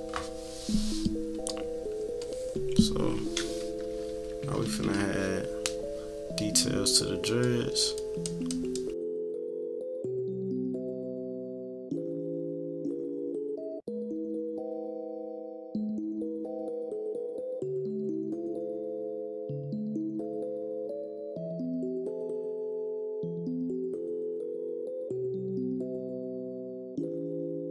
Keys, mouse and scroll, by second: 1.1 click, 1.5 click, 2.3 click, 3.9 -, 4.4 =, 4.6 =, 5.1-5.7 scroll up 4, 7.1 click, 7.4 click, 7.7 click, 8.0 click, 8.2 click, 8.5 click, 8.8 click, 8.9 click, 9.5 click, 9.7 click, 10.0 click, 10.5 click, 11.4 click, 11.7 click, 11.9 click, 12.4 click, 12.8 -, 13.0 =, 13.5 click, 14.9 click, 15.4 click, 15.6 click, 15.8 click, 16.4 click, 16.7 click, 17.5 click, 17.9 click, 18.7 click, 19.3 click, 20.3 click, 21.0 -, 21.2 =, 21.4 middle click, 21.4 scroll down 4, 21.5 =, 21.6 middle click, 21.9 click, 22.8 click, 23.2 click, 23.7 click, 24.0 click, 24.4 click, 24.6 click, 24.8 click, 25.1 click, 25.3 click, 25.8 click, 26.3 click, 26.5 click, 27.0 click, 27.4 click.